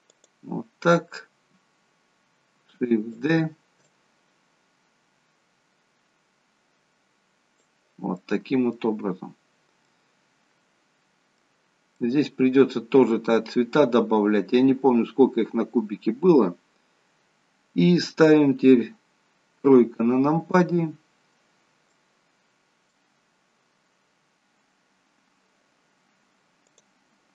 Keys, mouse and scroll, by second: 2.5 shift+d, 3.8 click, 8.1 middle click, 13.7 middle click, 19.6 KP_3, 21.9 middle click, 23.3-23.8 scroll up 1, 25.0-25.5 scroll up 1, 26.6 click.